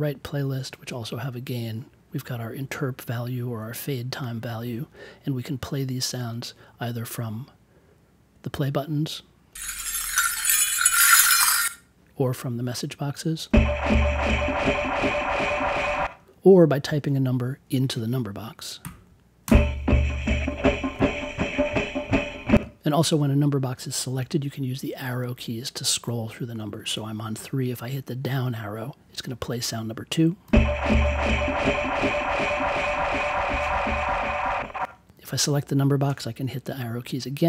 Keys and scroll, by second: 18.8 3, 19.4 Return, 30.4 Down.